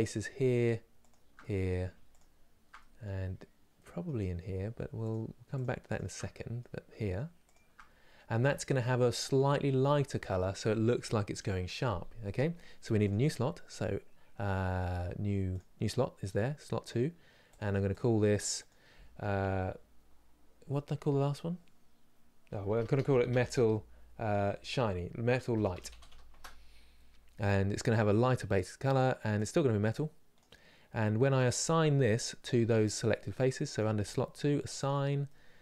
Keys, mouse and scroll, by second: 0.7 shift+click, 1.0 middle click, 2.4 middle click, 2.9 scroll up 2, 3.4-4.7 middle drag, 5.2 shift+click, 5.6 shift+click, 5.8-7.1 middle drag, 7.1 shift+click, 7.7 scroll down 2, 8.1-12.8 shift+middle drag, 12.8-17.8 drag, 29.1-34.9 drag, 34.9-35.6 middle drag.